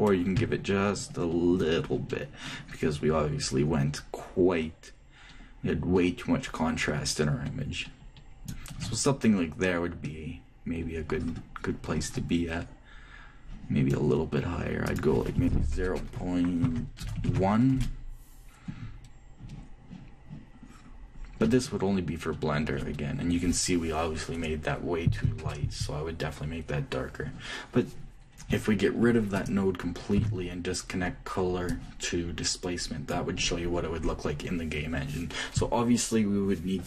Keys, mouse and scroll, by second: 10.8-15.4 middle drag, 15.4-17.3 drag, 17.7 BackSpace, 21.4-22.7 middle drag, 29.9-31.8 ctrl+drag, 30.8 ctrl+x, 32.5-34.1 drag.